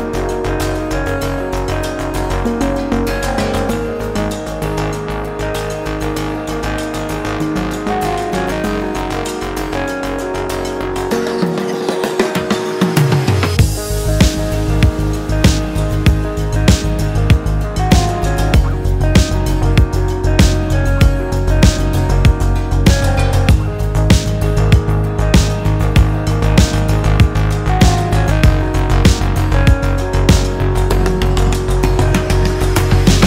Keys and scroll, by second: 22.7 shift+super+4, 30.7 super+t, 32.7-33.2 typing.